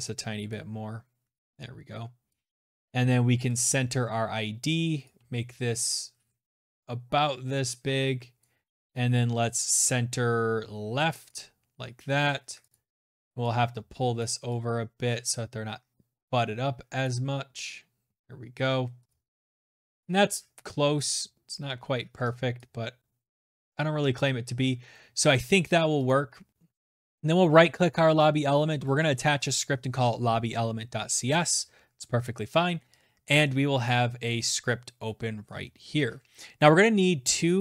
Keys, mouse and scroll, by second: 1.0 click, 7.1 click, 7.4 click, 7.6 click, 10.0 click, 11.5 click, 11.9 click, 12.9 shift+click, 13.0 shift+click, 15.7 click, 17.8 click, 18.5 click, 19.8 click, 20.9 click, 22.4 click, 23.9-24.3 scroll down 1, 24.7 click, 25.7 right click, 27.5 click, 29.9 Return, 32.5 click, 34.3-34.7 scroll, 35.0-37.5 scroll, 37.5-37.6 scroll.